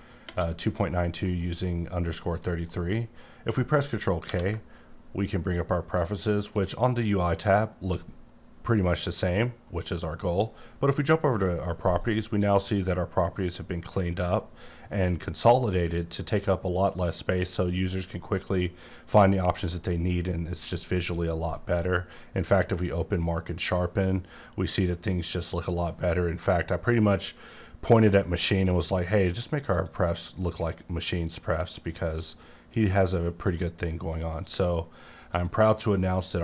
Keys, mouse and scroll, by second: 0.8 middle click, 2.2 scroll up 1, 2.3 middle click, 4.2 k, 5.5 click, 6.5 click, 12.0 click, 12.4 click, 21.7 click, 22.4 click, 28.5 click, 29.3 click, 29.7 click, 33.4 click, 34.3 click, 35.3 click.